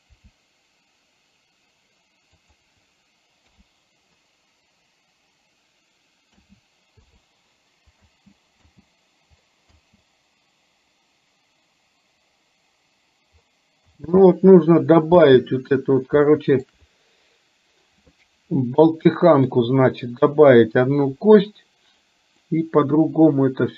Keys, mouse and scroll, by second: 0.2 r, 3.7 i, 6.4 a, 7.2 i, 8.2 space, 13.9 space, 16.4 shift+middle click, 22.5-23.7 middle drag.